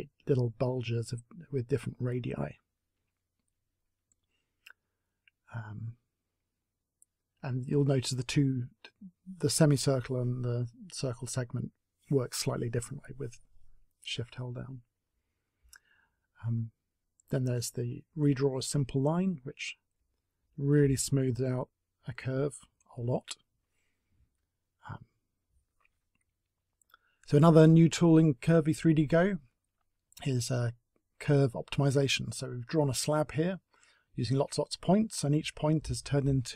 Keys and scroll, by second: 24.1 t, 25.7 Delete.